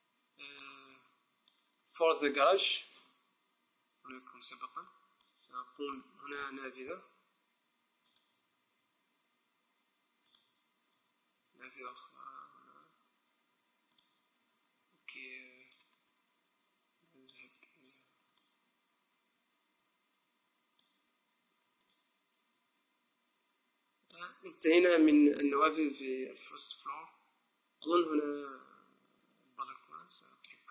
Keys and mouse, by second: 0.3-6.2 middle drag, 7.5 ctrl+r, 10.5-12.2 drag, 11.4 ctrl+r, 14.2-15.8 drag, 17.8-20.3 middle drag, 21.9-23.6 middle drag, 28.3-30.7 middle drag.